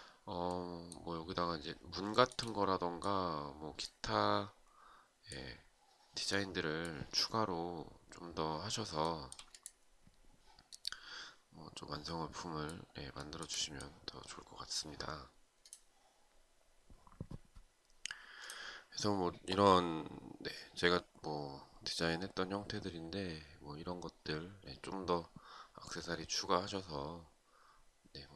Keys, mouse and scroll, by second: 1.7 shift+right click, 8.5 shift+right click, 12.7 shift+right click.